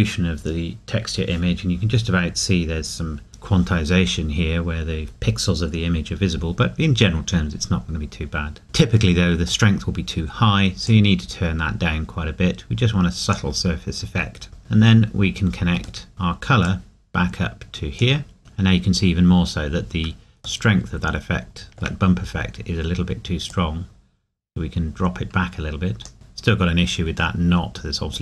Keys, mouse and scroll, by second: 6.6 scroll down 1, 9.1 middle click, 9.8-10.9 scroll up 1, 10.9 click, 14.3 scroll down 1, 14.6 middle click, 16.7 click, 18.4 scroll up 1, 20.7 shift+middle click, 22.1-22.7 scroll up 1, 26.1 shift+middle click, 27.4 middle click.